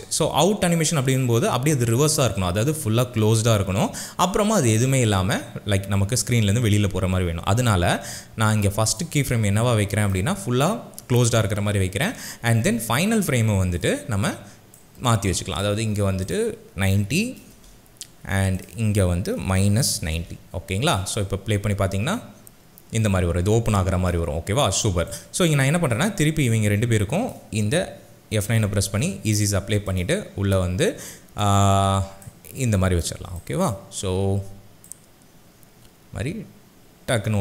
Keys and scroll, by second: 17.1 KP_9, 17.5 KP_0, 17.6 Return, 19.3 KP_Subtract, 19.7 KP_9, 19.9 KP_0, 20.2 Return, 28.6 F9.